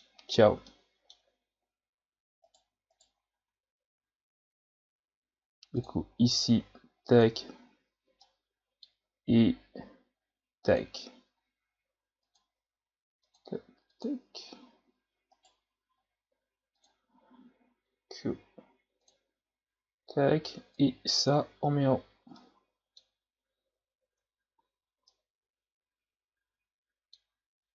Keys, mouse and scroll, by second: 0.7-2.5 middle drag, 2.5 right click, 2.9 shift+right click, 3.3 Tab, 4.0 a, 5.7-7.2 drag, 8.2-10.7 middle drag, 10.7 click, 12.3 click, 13.2 click, 13.9 click, 15.3 right click, 16.8-19.1 drag, 20.7-21.3 drag, 22.4-23.7 middle drag, 23.7 Tab, 24.1 Tab, 24.6 a, 25.1-27.3 middle drag, 27.3 scroll up 2.